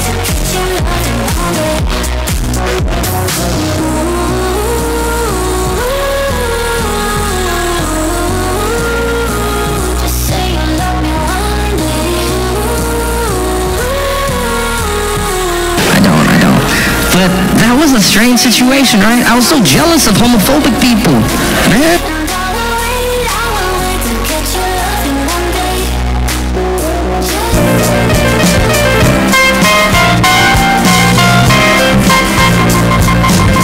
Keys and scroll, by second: 21.9 Page_Down.